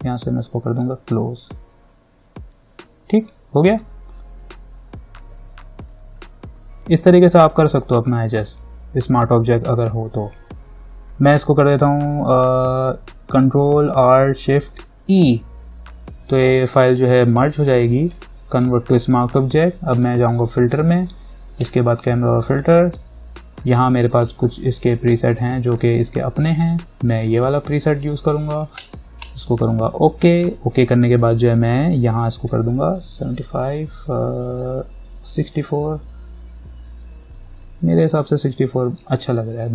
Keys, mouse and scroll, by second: 5.0 scroll up 1, 6.0 click, 15.2 ctrl+alt+shift+e, 16.6 right click, 18.3 click, 28.1 click, 31.5 click, 33.1-33.9 typing, 34.6 click, 35.3-36.1 typing, 37.4 click.